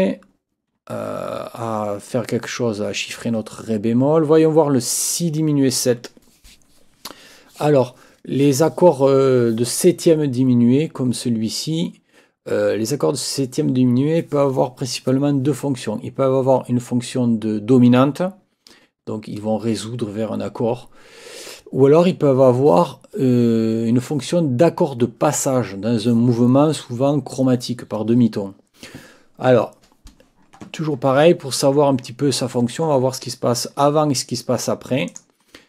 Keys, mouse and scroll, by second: 5.0 click, 35.1 click.